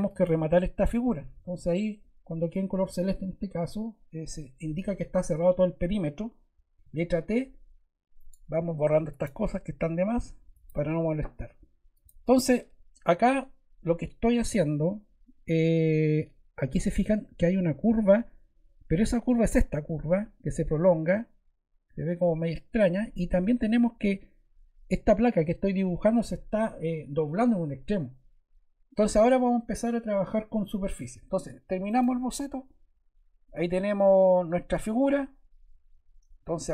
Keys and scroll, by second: 1.3 Escape, 6.8 t.